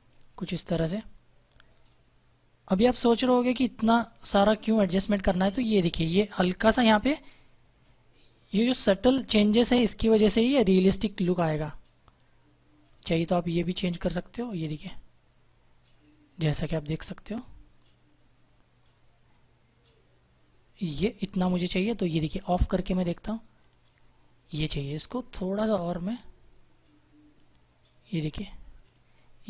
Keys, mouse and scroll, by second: 25.5 click.